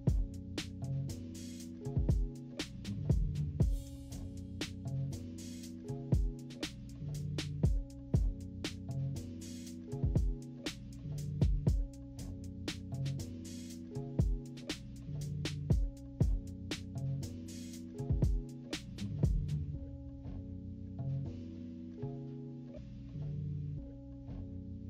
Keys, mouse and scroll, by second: 0.0 click, 0.3 click, 0.5 click, 1.7 click, 2.0 click, 2.6 click, 3.1 click, 3.3 click, 4.9 click, 5.8 click, 6.3 click, 6.7 click, 6.8 click, 7.0 click, 7.5 -, 7.7 scroll down 2, 7.8 =, 8.0 scroll up 2, 8.3 click, 8.6 click, 8.9 click, 9.1 click, 9.5 scroll down 1, 9.7 click, 10.1 click, 10.2 h, 10.6 click, 11.0 click, 11.6 click, 11.8 click, 12.5 click, 13.7 click, 14.4 -, 14.6 scroll up 2, 14.7 =, 15.5 click, 16.3 click, 17.1 click, 17.5 click, 18.1 -, 18.3 -, 18.5-19.1 scroll up 6, 18.5 =, 18.8 =, 19.3 click, 19.8 click, 20.7 click, 21.4 click, 23.0 click, 23.4 click, 23.6 click, 24.6 click.